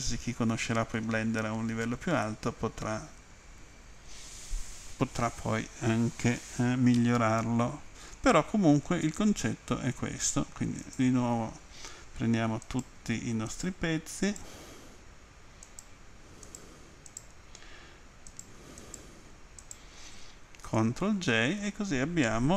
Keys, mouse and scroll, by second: 2.2-3.5 scroll up 2, 7.0 middle click, 8.7-9.5 scroll down 2, 10.8 right click, 12.7 shift+right click, 13.5 shift+right click, 14.3 shift+right click, 15.8 shift+right click, 16.5 shift+right click, 17.1 shift+right click, 18.3 shift+right click, 18.8 shift+right click, 19.6 shift+right click, 21.1 ctrl+j.